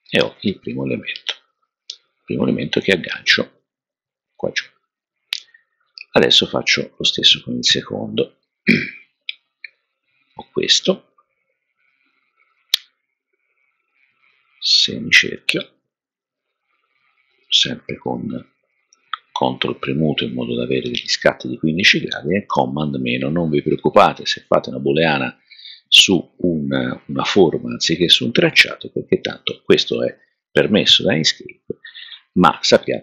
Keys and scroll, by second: 0.6 super+-, 22.7 super+-.